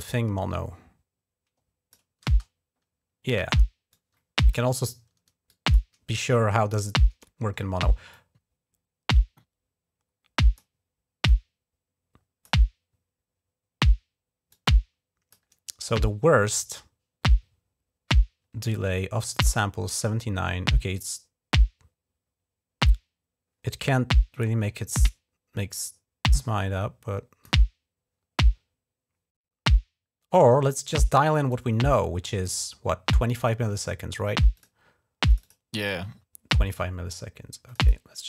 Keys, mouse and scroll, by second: 2.0 typing, 3.7 click, 5.3 click, 7.9-10.4 drag, 11.1-12.3 drag, 14.3 click, 24.2-27.3 drag, 30.1 click, 31.3-32.3 drag, 34.4 click, 35.1 click, 35.2 click, 36.5 click, 37.5 click, 38.1 click.